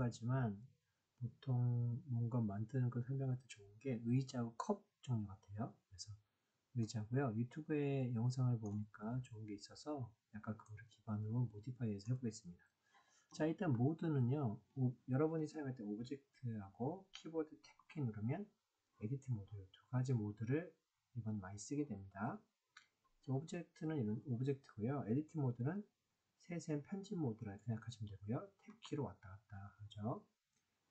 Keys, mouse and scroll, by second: 6.7-8.5 middle drag, 10.5-12.0 middle drag, 17.5 Tab, 20.7 Tab, 26.0 Tab, 28.6 Tab.